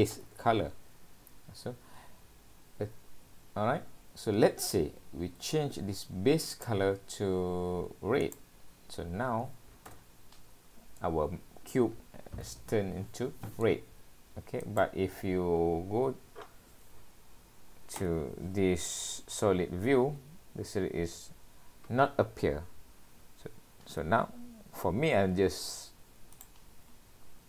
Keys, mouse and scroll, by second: 11.0 middle click, 14.7 click.